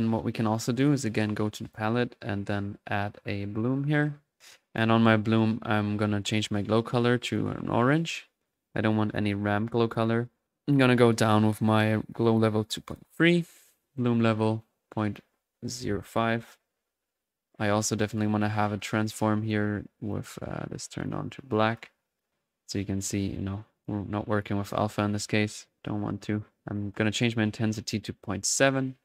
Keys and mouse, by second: 0.8-2.8 drag, 2.8 middle click, 3.6-6.3 drag, 6.4-10.4 drag, 12.1 click, 14.4-15.3 drag, 17.7-19.2 typing, 17.8 right drag, 18.1 click, 19.2 click, 19.5 click, 19.7-20.1 drag, 20.1-21.0 drag, 21.7-22.3 drag, 23.0 click, 23.8 click, 24.7 click, 27.3 click, 28.5 click, 28.7-29.0 drag.